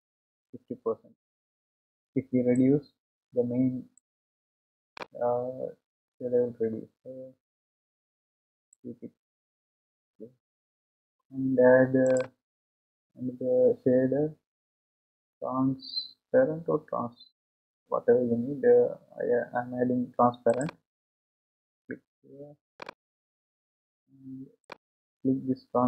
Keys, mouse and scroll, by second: 2.8-8.1 drag, 20.6 click.